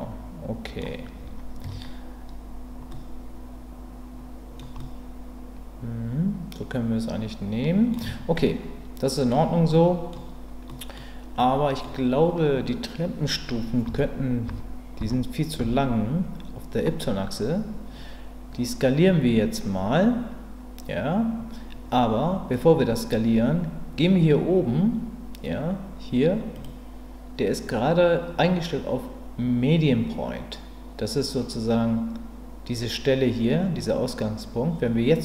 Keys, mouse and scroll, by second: 1.6 Tab, 2.9-4.6 middle drag, 4.8-7.9 middle drag, 8.0 Tab, 8.4 middle click, 9.7 middle click, 10.7 middle click, 11.4 middle click, 13.9 l, 14.5 l, 15.0 l, 15.6 l, 26.7-31.7 drag.